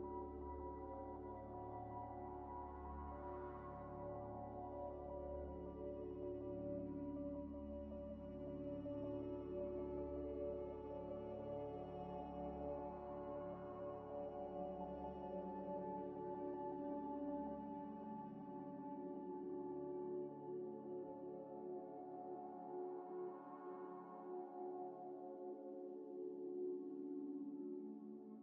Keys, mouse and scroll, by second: 0.1 scroll down 1, 0.8 scroll down 1, 1.2 scroll up 1, 1.8 Tab, 2.2 3, 2.6 middle click, 2.9 g, 4.1 ۶, 5.5 ئ, 5.8 Tab, 6.8 middle click, 7.3 Tab, 8.1 ة, 8.8 ث, 11.1 Tab, 11.4 ئ, 11.9 ctrl+ئ, 12.0 ctrl+ئ, 12.0 ctrl+z, 12.1 ctrl+z, 12.4 ctrl+scroll up 1, 12.4 scroll down 1, 12.6 Tab, 12.8 Tab, 12.8 middle click, 14.7 ئ, 15.1 scroll down 1, 15.2 ئ, 15.6 ذ, 16.2 scroll down 1, 16.7 Tab, 17.2 Tab, 17.2 Tab, 17.5 Tab, 18.0 Tab, 18.3 double click, 18.6 ئ, 19.9 scroll up 1, 20.6 Tab, 20.9 3, 21.6 middle click, 22.5 4, 23.0 scroll down 1, 23.7 ئ, 24.0 double click, 24.7 Tab, 25.1 Tab, 25.6 Tab, 25.9 middle click, 26.2 Tab, 26.6 Tab, 27.2 Tab, 27.5 3.